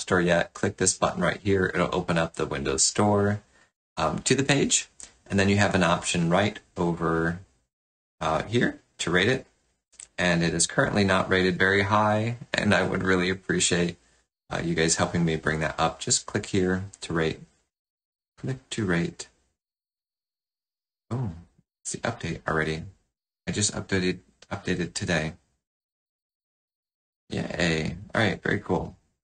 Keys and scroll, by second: 22.4 ctrl+z, 22.8 ctrl+z, 23.0 ctrl+z.